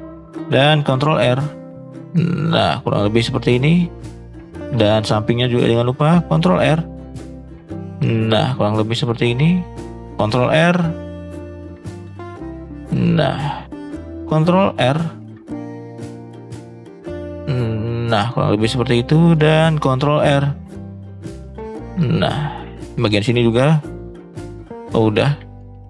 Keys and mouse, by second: 0.9 ctrl+r, 3.9 middle click, 5.4 middle click, 6.5 ctrl+r, 9.1 shift+middle click, 10.1 ctrl+r, 12.6 middle click, 13.5 shift+middle click, 14.7 ctrl+r, 18.8 shift+middle click, 19.3 middle click, 19.8 ctrl+r, 22.1 middle click, 22.7 middle click, 25.2 middle drag, 25.6 shift+middle click.